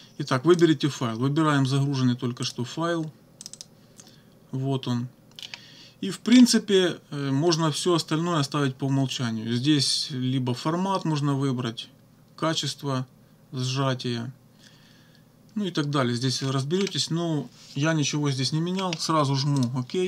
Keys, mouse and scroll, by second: 0.6 click, 2.5 click, 3.5 click, 5.4 scroll down 1, 6.3 scroll down 1, 16.4-16.7 scroll up 1, 16.8 scroll down 2, 18.8 scroll down 2, 19.6 click.